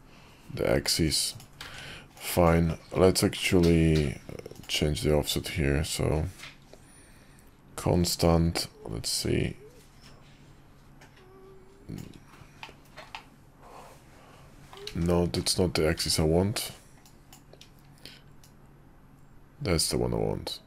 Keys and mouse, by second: 1.6 ctrl+`, 13.1-14.8 middle drag, 14.9 ctrl+z, 16.0 ctrl+`.